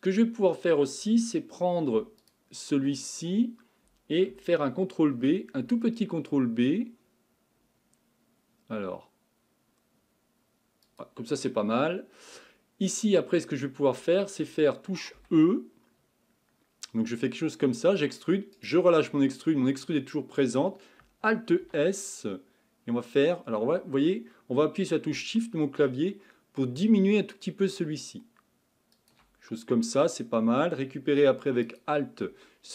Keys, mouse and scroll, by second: 2.2 alt+click, 5.0 ctrl+b, 11.6 middle click, 12.5-13.3 scroll up 2, 13.3-15.2 scroll down 1, 15.2 e, 21.6 alt+s, 29.5-31.4 scroll up 2, 31.4-31.7 scroll up 2, 31.7 alt+click.